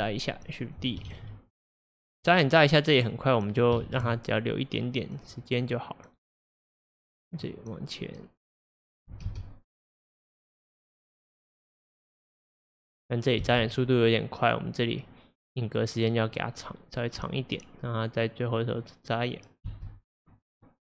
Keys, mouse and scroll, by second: 0.1-1.1 drag, 1.1 shift+d, 2.6-3.9 drag, 3.9 shift+d, 5.7-9.3 drag, 9.3 space, 13.5 space, 15.0-19.7 drag, 19.7 space.